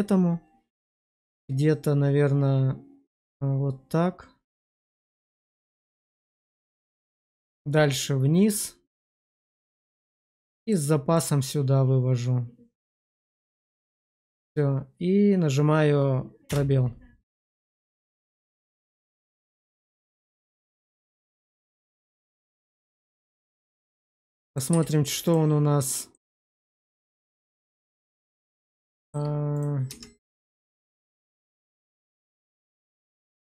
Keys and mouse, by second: 9.7 click, 10.5 click, 11.1 click, 13.3 click, 16.6 space, 17.4-22.2 middle drag, 22.8 shift+middle drag, 23.2 middle click, 24.6 q, 26.1-27.8 middle drag, 28.6 middle drag, 29.0 shift+middle click, 29.5 click, 29.8 Tab, 31.4 Tab, 31.9 click, 32.5 middle click, 33.4 click.